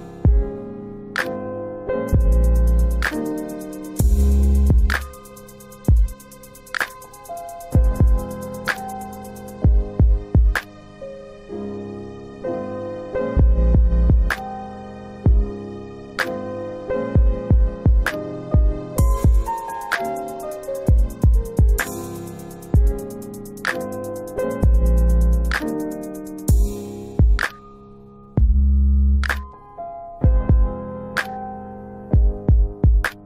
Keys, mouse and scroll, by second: 3.1 space, 4.3 middle click, 4.4 space, 5.1 space, 8.1 middle click, 8.2 space, 8.9 space, 9.5 space, 11.3 space, 11.6 scroll up 1, 12.2 middle click, 12.5 scroll up 2, 12.6-12.9 scroll down 1, 12.9 middle click, 13.2 alt+w, 14.8 alt+w, 15.3 middle click, 15.6-16.2 scroll up 2, 16.2 middle click, 17.3 click, 18.2 alt+middle click, 18.7 click, 22.9 alt+middle click, 24.6 middle click, 25.6 click, 28.4 alt+middle click, 29.9 click.